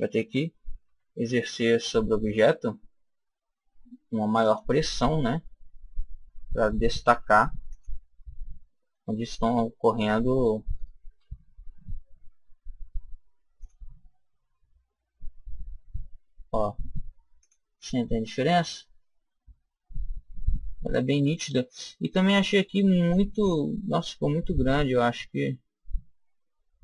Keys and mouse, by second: 0.7 ctrl+r, 7.7 click, 9.6-11.8 middle drag, 11.5 ctrl+r, 17.3 click, 18.4 middle click, 18.5 click, 18.7 click, 18.9 click, 19.2 middle click, 24.5-26.3 middle drag.